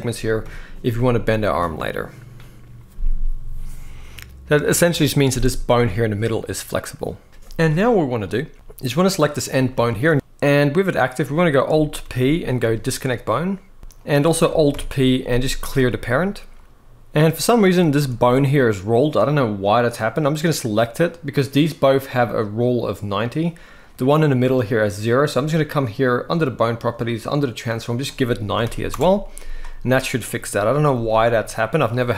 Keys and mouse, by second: 0.1 KP_1, 8.3 shift+middle click, 9.5 shift+middle click, 10.1 ctrl+z, 11.7 alt+p, 13.8 g, 14.4 alt+p, 16.9 ctrl+z, 17.5-17.8 shift+middle drag, 18.1 click, 20.7 click, 23.5 click, 27.6-28.6 drag, 30.0 click, 30.6 g.